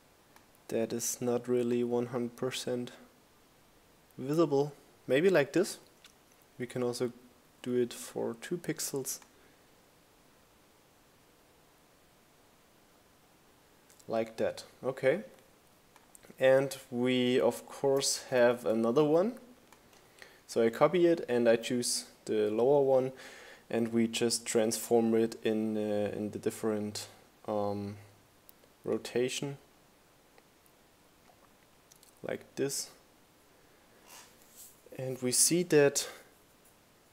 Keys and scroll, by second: 5.7 Up, 6.5 Down, 17.3 super+c, 17.5 super+v.